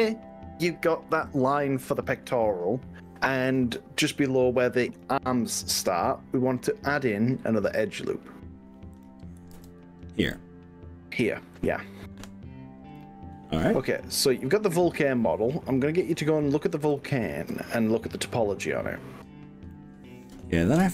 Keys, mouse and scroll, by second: 3.5 click, 4.9 click, 7.7 click, 8.9 click, 9.5 ctrl+r, 13.0 right click.